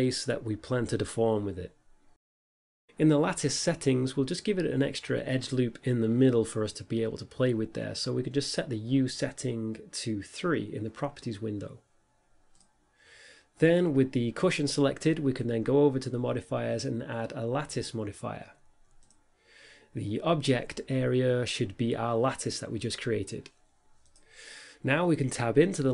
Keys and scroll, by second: 0.0 s, 0.6 shift+z, 25.6 Tab.